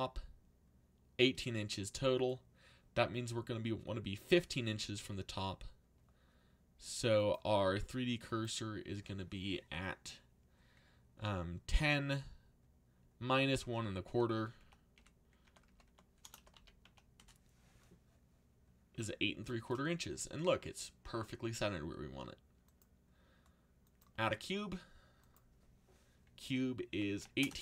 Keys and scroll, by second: 13.6-17.3 typing, 26.6-27.6 typing.